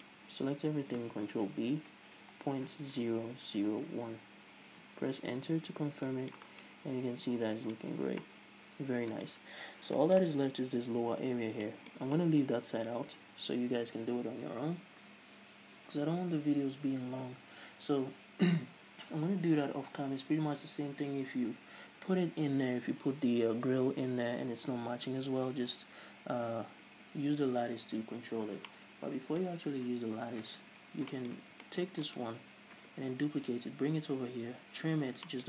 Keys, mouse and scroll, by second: 0.0 Tab, 0.6 a, 1.0-2.0 scroll up 2, 2.0 ctrl+b, 5.3 Return, 5.7 Tab, 6.0 a, 6.3 scroll down 1, 6.6-32.6 middle drag, 6.9 scroll down 1, 8.3-8.7 scroll up 1, 9.9 scroll up 1, 32.0 scroll down 1, 32.6 right click, 33.3 Tab.